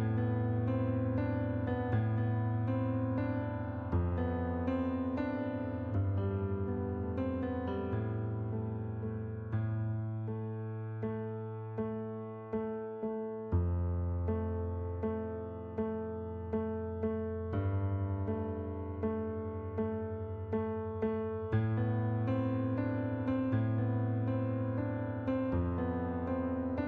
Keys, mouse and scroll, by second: 1.0 click, 1.8 click, 3.4 click, 5.9 right click, 8.1 click, 8.9 click, 9.5 KP_4, 10.8 right click, 13.0 click, 13.9 KP_4, 14.2 Return, 14.9 right click, 16.0 ctrl+d, 17.3 click, 18.6 click, 19.6 shift+click, 21.5 click, 22.7 click, 23.7 click, 24.7 click, 25.7 click, 26.4 right click.